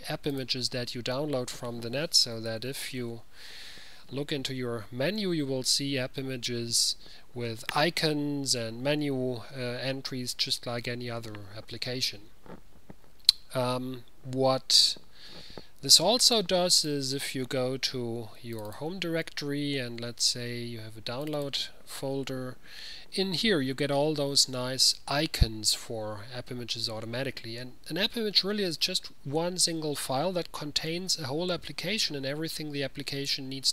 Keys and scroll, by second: 2.2-3.5 typing.